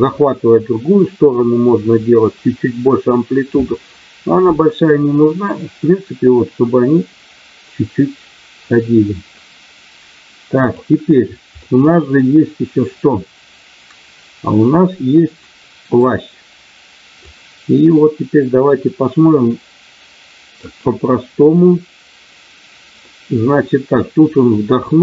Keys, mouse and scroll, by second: 4.8-10.8 drag, 11.6-15.9 middle drag, 17.2-20.6 drag, 22.9-24.9 middle drag.